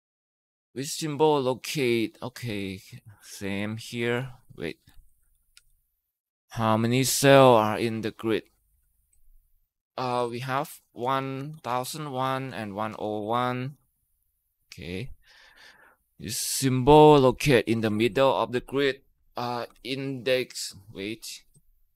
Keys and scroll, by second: 3.7-4.5 typing, 5.4 Delete, 9.8-13.0 typing, 13.5 Tab, 17.6-20.1 typing, 21.6-21.9 typing.